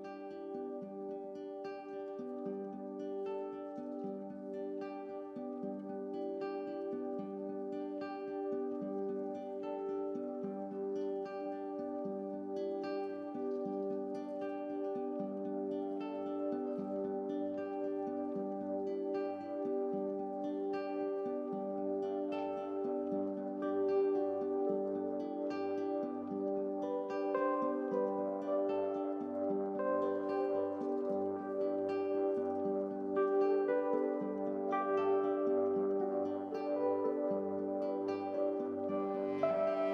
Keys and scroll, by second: 10.6 ctrl+z, 12.0 ctrl+t.